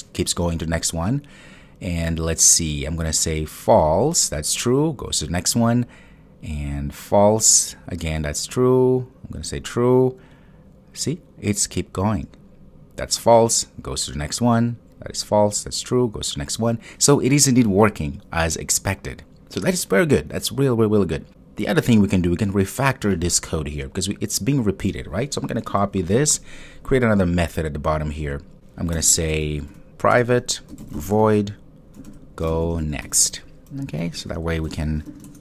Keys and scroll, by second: 25.8 super+c, 30.1 Return.